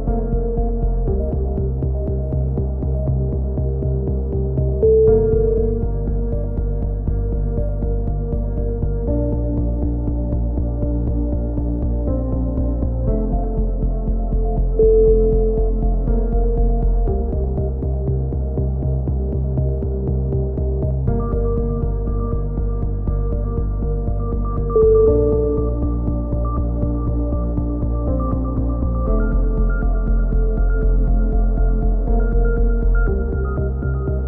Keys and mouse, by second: 11.3 ctrl+KP_1, 11.7 z, 11.9 click, 16.1 click, 17.1 e, 17.6-18.1 drag, 18.3 s, 18.9 n, 20.6 n, 20.9 a, 22.5 alt+h, 22.7 a, 23.3 Tab, 23.6 z, 27.8 KP_7, 28.4 z, 29.0-29.8 drag, 30.5 z, 30.8 Tab, 32.5 ctrl+KP_1, 32.8 z.